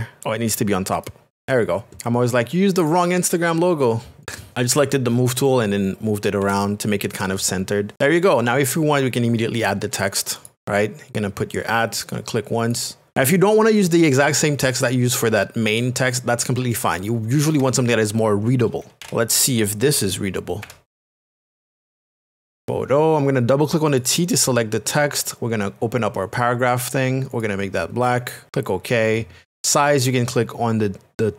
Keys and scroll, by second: 4.5 Left, 4.7 Right, 6.4 Left, 7.9 ctrl+KP_Subtract, 8.6 ctrl+KP_Add, 19.0 e, 19.4 l, 21.7-23.1 typing.